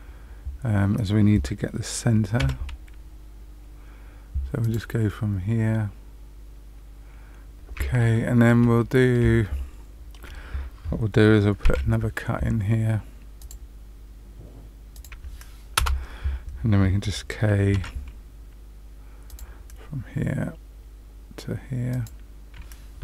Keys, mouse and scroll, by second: 2.3 k, 8.0 shift+middle click, 8.7 middle click, 9.4 shift+middle click, 11.6 k, 17.7 k.